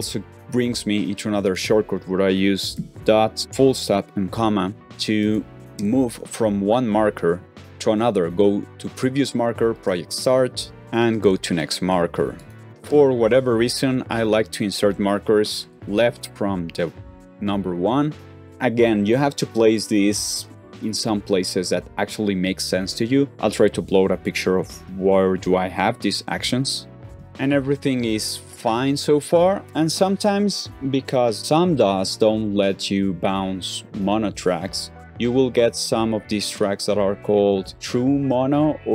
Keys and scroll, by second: 2.6 space, 3.3 ,, 5.7 ,, 10.7 ., 12.8 typing.